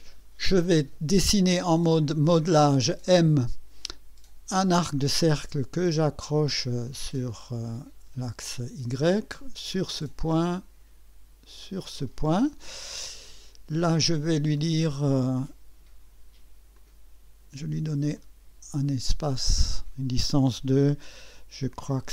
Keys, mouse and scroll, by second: 3.0 click, 4.5 click, 6.6 click, 9.7 click, 11.6 click, 13.2 right click, 14.5 right click, 15.4 click, 16.7 click, 17.9 click, 19.4 click.